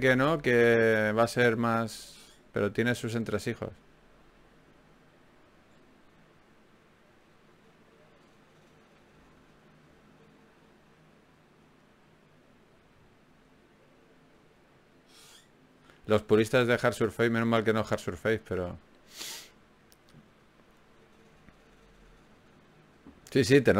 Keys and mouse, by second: 0.6 f, 4.6 ctrl+Tab, 5.4 click, 6.2 g, 7.0 click, 9.2 ctrl+Tab, 9.9 click, 10.8 f, 12.4 f, 12.8-14.4 middle drag, 16.0-19.0 middle drag, 19.4 ctrl+Tab, 20.4-22.4 right drag, 22.1 click.